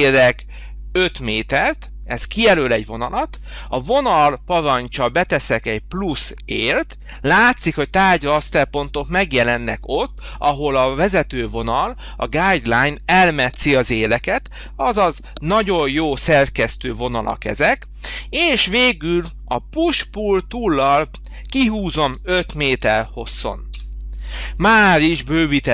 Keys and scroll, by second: 1.2 5, 1.6 Return, 22.0 5, 23.7 Return.